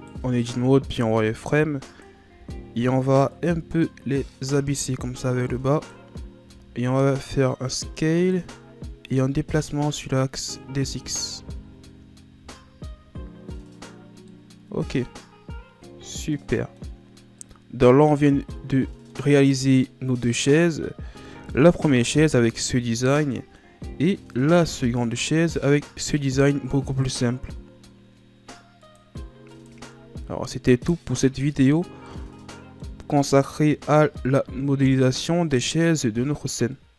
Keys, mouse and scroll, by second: 0.5 b, 3.3-6.4 drag, 6.4 s, 9.0-10.9 drag, 10.9 Tab, 11.4 a, 11.7-12.5 scroll down 1, 12.6-14.2 scroll down 3, 14.2-17.3 middle drag, 17.4-22.6 middle drag, 22.6 scroll down 1, 22.9-25.2 middle drag, 25.2 click, 25.6 click, 28.8 click, 29.5 click, 30.5-33.5 middle drag, 33.5 scroll up 4, 34.1-36.1 middle drag, 36.1-36.7 scroll up 4, 36.7 middle click.